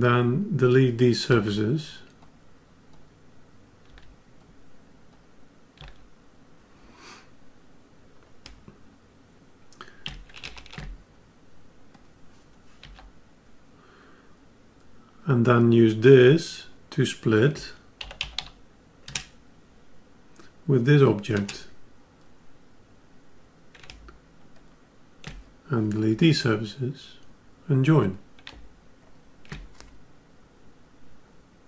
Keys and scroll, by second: 10.5 ctrl+alt+w.